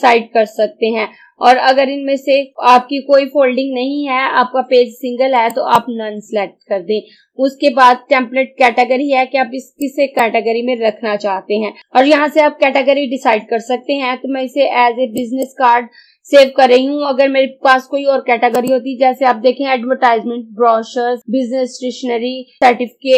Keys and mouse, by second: 5.6 click, 9.9-11.8 drag, 15.2 click, 18.6 click.